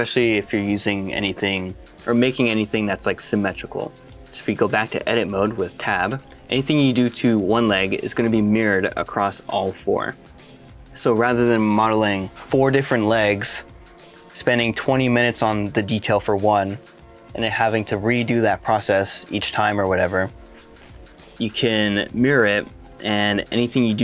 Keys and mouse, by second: 3.7 middle click, 6.4 shift+middle click, 8.8 middle click, 9.7 s, 10.9 click, 22.1 middle click, 22.7 shift+middle click, 23.2 middle click.